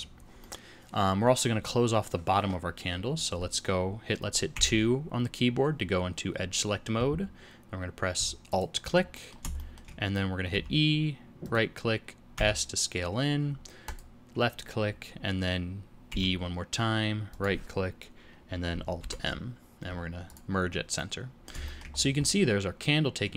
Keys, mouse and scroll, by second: 0.4 middle click, 4.5 2, 8.4 alt+click, 9.1 middle click, 9.5 shift+middle click, 10.5 e, 12.3 s, 16.0 e, 18.9 alt+m, 20.9 middle click, 21.6 shift+middle click, 21.8 shift+scroll up 1, 21.9 scroll down 3, 22.2 middle click.